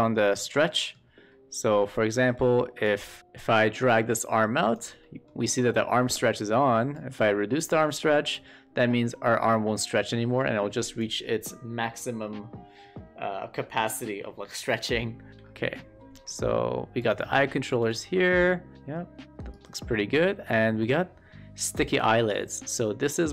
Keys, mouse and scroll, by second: 0.3 shift+middle drag, 0.6 middle click, 2.0 shift+middle click, 2.9 click, 3.2 w, 3.4-4.7 drag, 4.9 shift+middle click, 6.8-8.3 drag, 9.1-11.0 drag, 15.7-16.2 shift+middle drag, 17.0-17.4 drag, 17.7 w, 18.7 click, 22.0-23.3 drag.